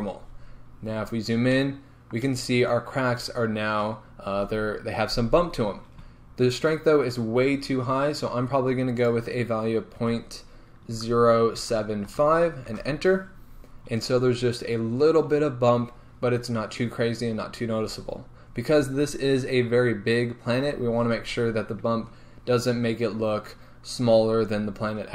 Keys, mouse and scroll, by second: 0.8 scroll up 1, 1.6-12.7 shift+middle drag, 12.7-25.1 drag, 12.9 Return, 13.9-15.9 scroll up 3, 15.9-17.0 scroll up 1, 17.0-17.7 scroll down 2, 22.0 scroll up 1.